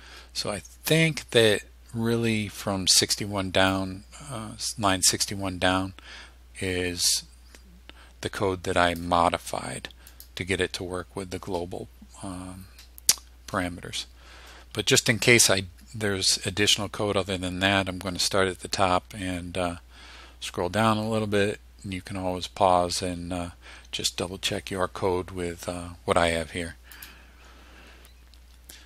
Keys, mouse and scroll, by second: 3.8-9.3 drag, 10.2 click, 11.9 scroll up 1, 12.6-13.1 scroll up 1, 13.6-14.1 scroll up 1, 18.5-19.1 scroll down 2, 19.5-20.5 scroll down 2, 22.9-23.5 scroll down 1, 27.0 click.